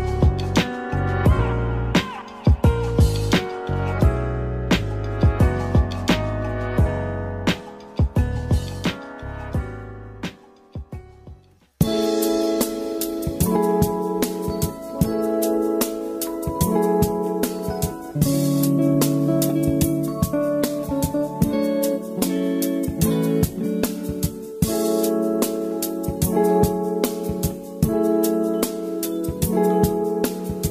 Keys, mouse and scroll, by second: 0.9 g, 5.1-7.5 drag, 7.5 middle click, 8.2 scroll up 2, 9.9 click, 10.7 space, 11.3 click, 11.8-14.1 middle drag, 14.1 space, 14.3-16.2 middle drag, 16.2-18.8 drag, 18.9 z, 20.7-23.7 drag, 25.1-26.5 middle drag, 26.5-27.6 drag, 27.6 space, 28.1 click, 28.5-30.7 middle drag.